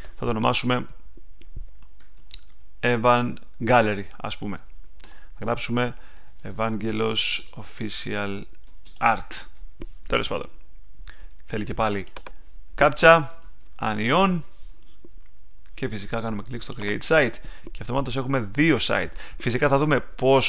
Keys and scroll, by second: 1.7-4.9 typing, 5.0 Tab, 6.0-9.6 typing, 13.0-14.5 typing.